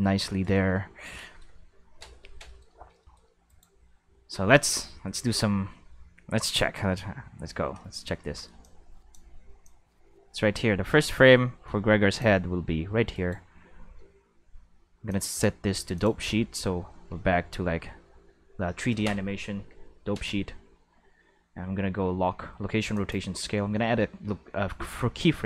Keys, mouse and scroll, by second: 1.3 shift+middle click, 2.2 middle click, 2.4-2.8 shift+middle drag, 3.0 shift+middle drag, 3.4-4.7 right drag, 6.4 right click, 8.6-9.1 drag, 9.6-12.2 drag, 13.1-14.6 right drag, 15.1 click, 15.9 click, 17.1 q, 19.5 i, 22.9 click.